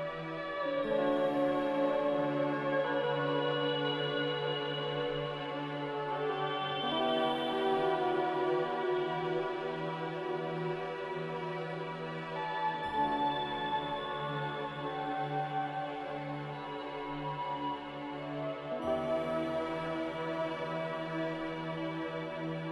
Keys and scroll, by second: 16.6 c.